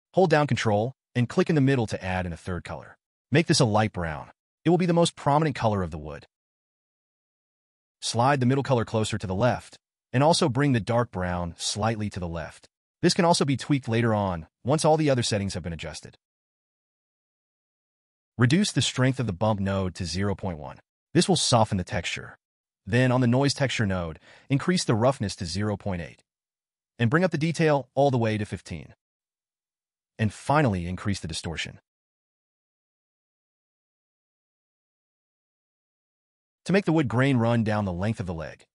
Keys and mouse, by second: 2.9-4.7 drag, 8.4-10.6 drag, 11.8 click, 16.8-19.6 drag, 23.3-24.8 drag, 27.1 click, 30.3-31.7 drag, 35.3-36.3 drag.